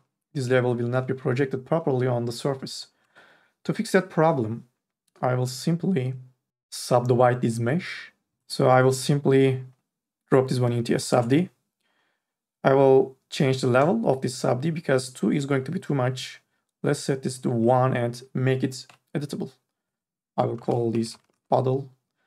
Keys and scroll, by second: 8.5 ctrl+z, 19.1 c, 20.5 b, 20.7 o, 20.9 t, 21.1 l, 21.3 Return.